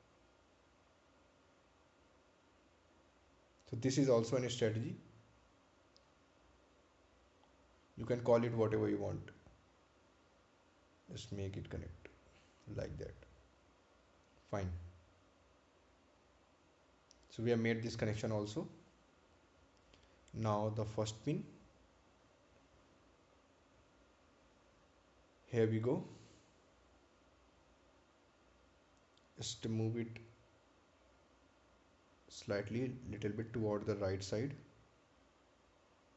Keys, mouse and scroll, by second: 0.0 click, 4.8 click, 14.8 click, 17.8 right click, 18.7 scroll down 1, 19.5 scroll up 1, 20.3 right click, 21.2 scroll down 1, 22.5 ctrl+click, 26.8 scroll up 1, 27.6 click.